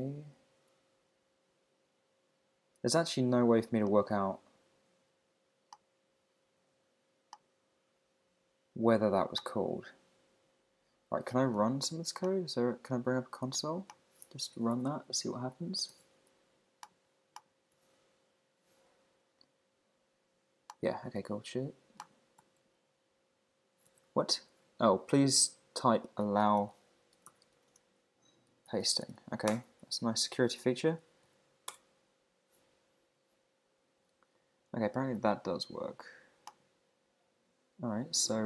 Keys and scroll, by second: 12.4 Escape, 14.5 shift+super+Left, 14.7 shift+Right, 15.6 shift+Right, 15.9 super+c, 17.7 super+v, 21.2 super+v, 29.5 Return, 31.2 super+v, 31.7 Return.